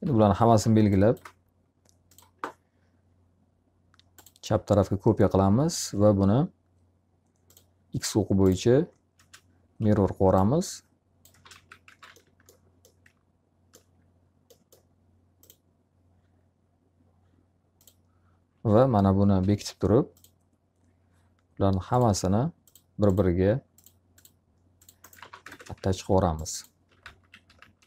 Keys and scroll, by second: 0.0 w, 8.6 space, 9.7 s, 11.2 space, 11.4 x, 11.8 z, 12.0 alt+a, 18.8 h, 24.6 alt+a, 25.4 ctrl+space, 26.5-27.8 typing.